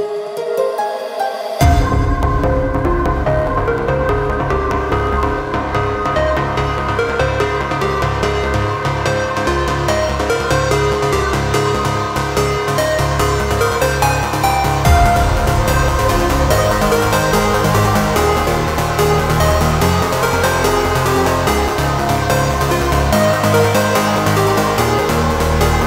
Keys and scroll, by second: 23.0 ctrl+z.